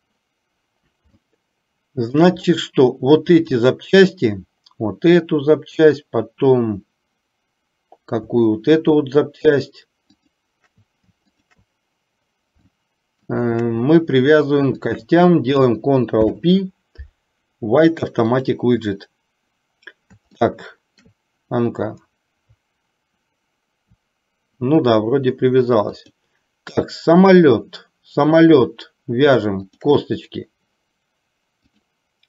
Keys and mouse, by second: 1.4 shift+middle click, 3.4 click, 10.1 shift+click, 12.9 shift+middle click, 16.3 ctrl+p, 20.5 shift+middle click, 26.3 click, 29.7 shift+click, 31.7 click.